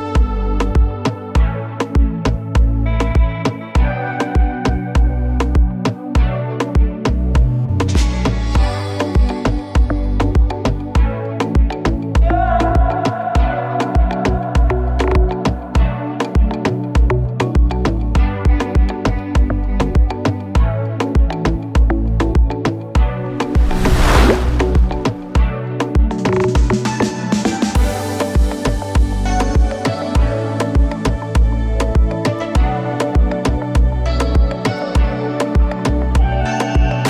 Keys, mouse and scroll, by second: 2.3 click, 3.1 right click, 4.9 click, 7.4 ctrl+a, 9.5 click, 25.9-27.2 drag, 32.6 space.